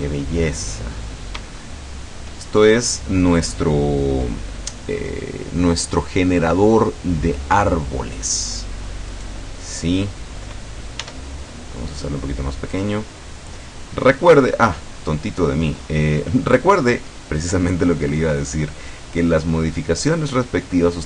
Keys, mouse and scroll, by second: 1.0 scroll up 2, 2.7-4.8 shift+scroll up 3, 9.2 right click, 11.0 s, 12.8 click, 14.0-14.4 scroll up 2, 14.4-14.8 scroll down 2, 15.4-15.8 scroll down 2, 15.8 scroll up 2, 16.1 scroll down 2, 16.2 scroll up 2, 16.4-18.0 scroll down 2, 18.0-21.0 middle drag.